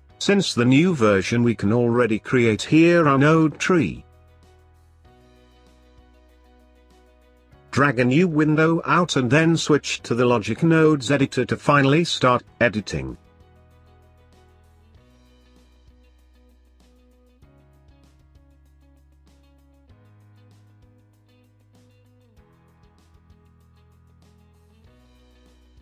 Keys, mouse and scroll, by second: 1.1-3.9 drag, 3.9 l, 8.6-15.0 drag, 17.0-22.2 drag.